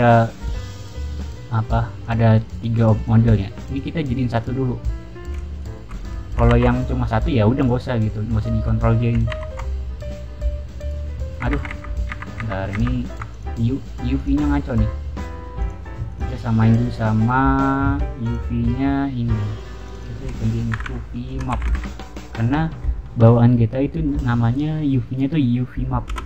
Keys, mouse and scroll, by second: 0.6 click, 1.2 click, 1.9 click, 2.3 click, 2.9 click, 3.2 click, 3.6 click, 4.3 click, 5.5 shift+click, 6.5 ctrl+j, 7.5 click, 8.3 shift+click, 9.2 ctrl+j, 10.7 click, 11.0 middle click, 11.5 ctrl+z, 12.0 ctrl+z, 12.3 ctrl+z, 12.7 ctrl+z, 13.2 click, 13.7 middle drag, 14.1 click, 14.4-14.7 middle drag, 15.5 click, 16.0 click, 18.1 click, 19.7 click, 19.9 click, 20.7-22.2 typing, 26.0 Return.